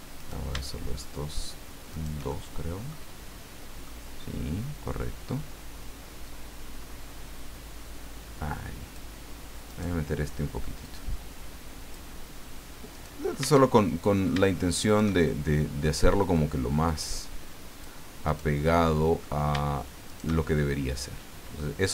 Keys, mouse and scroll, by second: 0.2 right click, 1.9 shift+right click, 2.3 shift+middle click, 3.8-5.0 middle drag, 6.2 click, 6.8-7.3 scroll up 1, 9.6 right click, 10.8-12.1 drag, 12.1 middle click, 12.9 right click, 13.7 shift+middle click, 14.8 shift+right click, 15.2 shift+middle click, 16.9 click, 18.2 right click, 18.7 middle click, 20.1 shift+right click, 20.4-21.7 shift+middle drag.